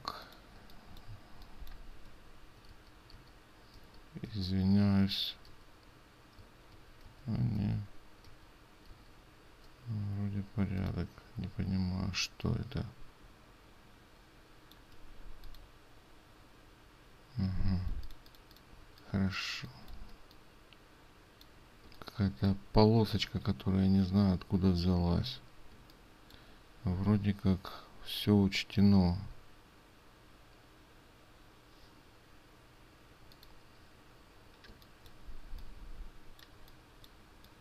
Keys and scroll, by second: 2.9 ctrl+z, 3.4 ctrl+z, 18.2 ctrl+space.